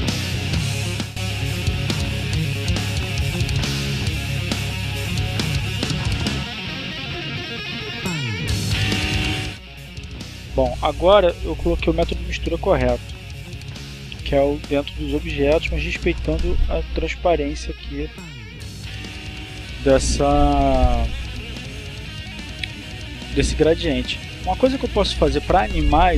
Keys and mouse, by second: 0.5 click, 3.3-4.5 drag, 4.7-5.9 drag, 11.9-14.2 drag, 14.5-18.7 drag.